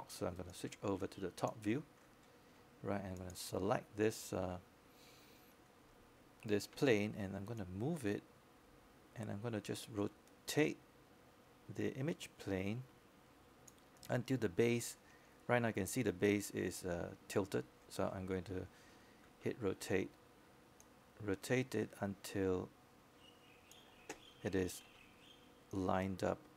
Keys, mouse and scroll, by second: 21.3 e, 22.8 click.